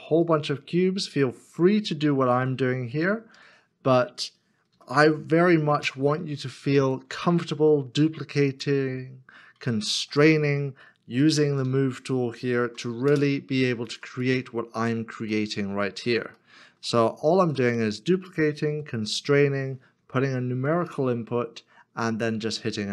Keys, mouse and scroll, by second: 2.0 Return, 2.3 shift+d, 3.3 4, 4.7 y, 5.8 Return, 7.3 shift+middle click, 9.9 shift+d, 11.6 y, 13.1 2, 15.3 middle click, 16.9 shift+middle click, 20.0 2, 20.8 Return.